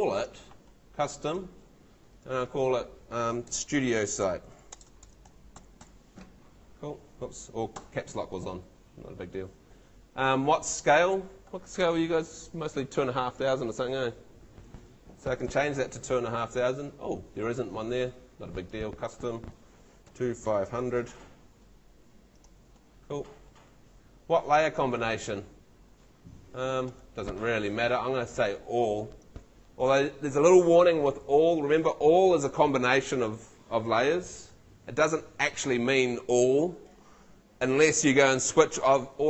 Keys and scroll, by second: 3.3-6.3 typing, 19.8-21.3 typing.